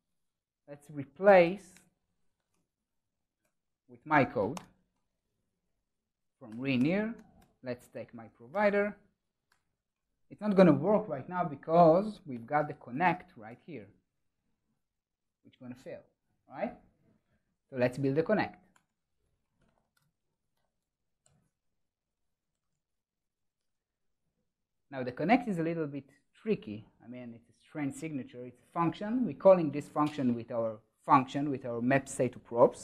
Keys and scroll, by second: 6.5 Return, 12.2 super+s, 12.3 ctrl+shift+super+o.